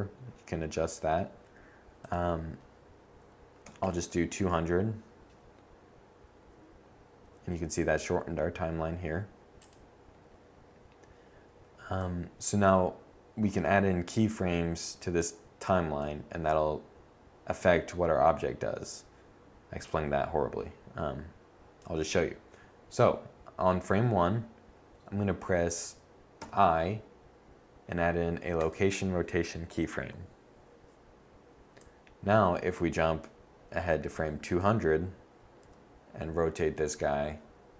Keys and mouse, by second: 1.8-3.8 drag, 3.8 0, 9.4-11.5 drag, 11.8 click, 19.6 click, 26.2 i, 31.7-33.4 drag, 35.4 r.